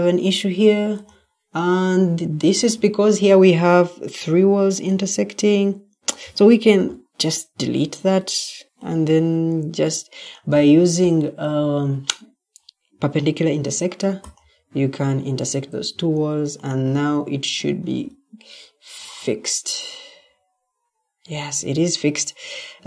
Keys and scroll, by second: 2.2 Escape, 6.6 Delete, 15.8 Escape, 17.7 Escape.